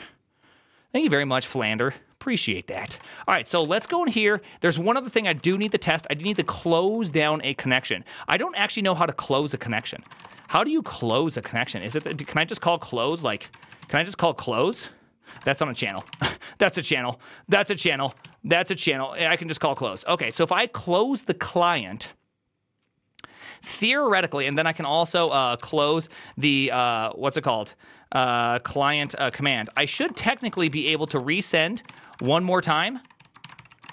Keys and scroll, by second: 2.7 alt+{, 3.3-4.0 typing, 4.2 ctrl+u, 5.1-7.7 typing, 5.3 Return, 5.5 ctrl+d, 5.6 ctrl+d, 5.9 ctrl+c, 9.2 ctrl+u, 9.4 ctrl+u, 9.7 ctrl+c, 9.7-18.3 typing, 11.3 ctrl+c, 11.4 ctrl+c, 19.0 ctrl+y, 19.5-20.7 typing, 25.7 typing, 27.9-33.9 typing.